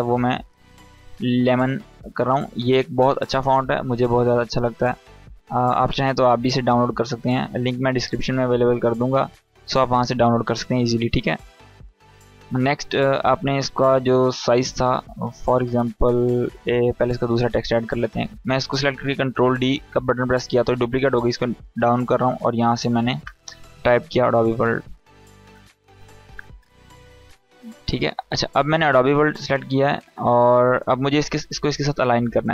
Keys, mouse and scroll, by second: 1.2-2.5 typing, 4.2 click, 5.1 Caps_Lock, 5.6-7.2 drag, 7.2 scroll up 1, 7.4 space, 7.5-8.2 click, 7.9 space, 8.5-9.4 drag, 16.9 click, 17.2 ctrl+d, 20.5 click, 22.7 Caps_Lock, 23.4-25.6 typing, 27.2 click, 29.2-29.6 scroll down 1, 29.6 Caps_Lock, 30.0 scroll up 1, 31.7-32.5 drag.